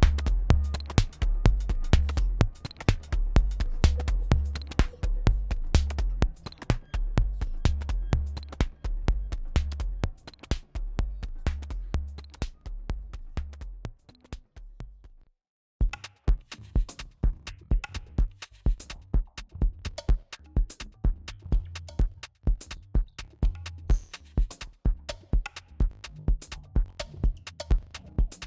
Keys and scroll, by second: 9.5 super+s, 15.2 space.